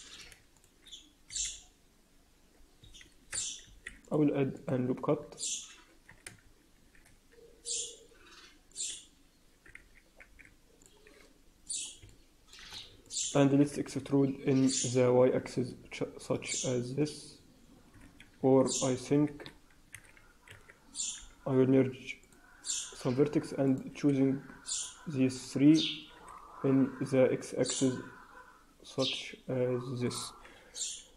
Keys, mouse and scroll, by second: 0.0 click, 0.5 shift+click, 1.2 g, 3.9 ctrl+r, 5.2 scroll up 1, 6.4 shift+z, 6.7 shift+z, 7.7 click, 8.6 click, 9.4 s, 12.0 middle click, 12.6 scroll down 1, 13.0 shift+middle click, 13.7 e, 19.8 a, 20.1 a, 20.4 a, 21.0 alt+m, 23.6 click, 24.6 shift+click, 25.2 shift+click, 26.2 e, 30.9-31.1 scroll down 1.